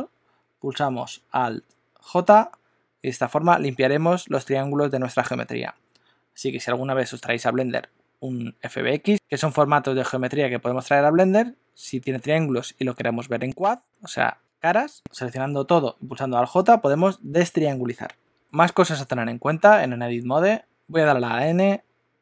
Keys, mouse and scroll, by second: 2.0 alt+j, 18.2 middle click, 18.8 shift+middle click, 20.5 Tab, 20.7 n, 21.4 n.